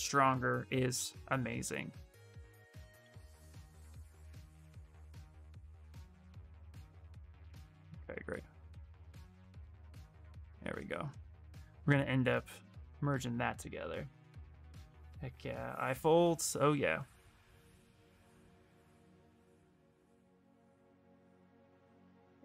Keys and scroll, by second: 3.1 b, 21.8 b, 22.3 e.